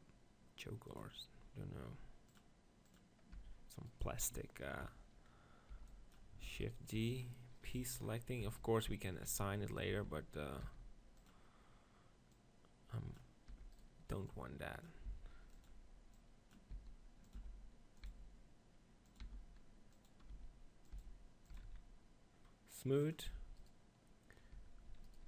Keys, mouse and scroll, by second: 0.0 middle click, 3.3 Tab, 3.9 click, 5.8 b, 6.4 shift+d, 6.7 click, 7.4-8.5 right drag, 7.8 p, 8.5 Tab, 9.3 s, 10.0 Tab, 10.6 s, 11.3-13.8 drag, 11.3 right click, 13.6 e, 15.1 s, 15.6-17.1 drag, 16.9 s, 17.4 e, 18.2 s, 19.4 e, 20.2-24.4 drag, 20.3 e, 21.0 s, 21.6 Tab, 21.6 z, 23.7 right click, 24.5 Tab, 24.9 z.